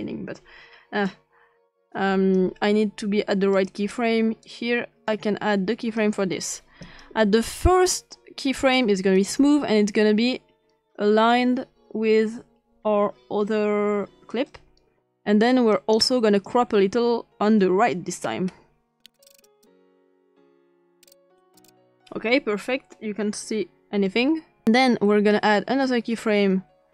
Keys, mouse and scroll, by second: 0.0-1.1 drag, 1.9 click, 3.5 click, 4.4-5.1 drag, 5.8 click, 6.8 click, 8.6 click, 9.1 click, 9.9-14.3 drag, 15.7-16.5 drag, 18.2-19.0 scroll up 2, 19.0 scroll down 2, 19.2-19.8 scroll up 3, 19.9 click, 20.1 click, 20.4 click, 20.9 scroll down 1, 21.1 scroll up 1, 21.3 scroll down 2, 21.4 click, 21.7 scroll up 1, 24.6 click, 25.3 click.